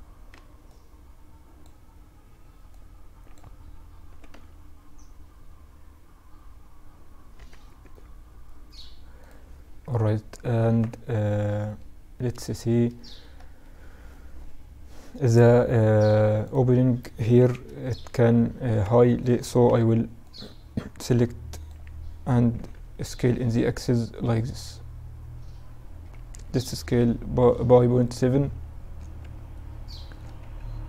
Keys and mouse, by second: 1.6 b, 3.4 s, 9.1 z, 9.9 Tab, 10.1-12.2 middle drag, 16.6 KP_1, 17.3 Tab, 17.6 z, 18.1 a, 18.9 b, 21.8 s, 27.6 z, 28.3 Tab, 29.0-30.8 middle drag, 29.5 Tab.